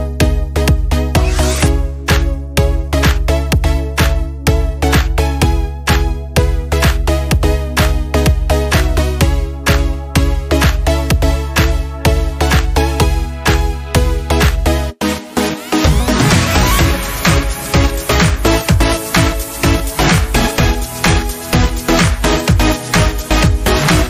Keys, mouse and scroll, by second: 0.0-1.1 scroll down 1, 1.1 space, 1.3 click, 1.6 space, 2.5-5.8 drag, 6.6 scroll down 1, 9.6 click, 19.5 click, 23.4 click.